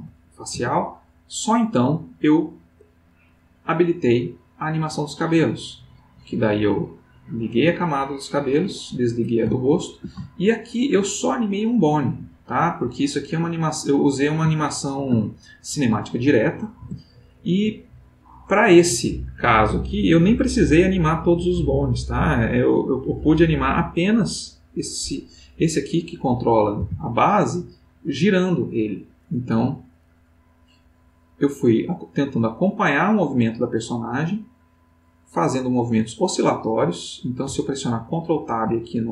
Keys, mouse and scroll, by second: 0.5 Tab, 2.3 click, 3.1 click, 6.9 click, 8.2 click, 9.6-10.2 ctrl+middle drag, 10.5-11.4 ctrl+shift+middle drag, 12.3 click, 14.6-15.3 ctrl+middle drag, 16.8 Tab, 18.2-25.3 drag, 26.8 r, 29.4 Escape, 30.8-36.3 drag.